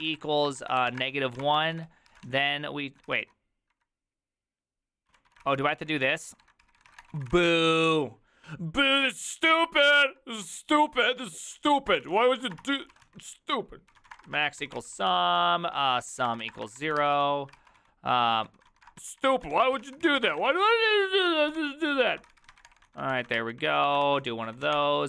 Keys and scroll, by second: 0.0-3.8 typing, 2.1 ctrl+c, 3.1 ctrl+c, 4.9-8.0 typing, 9.8-25.0 typing.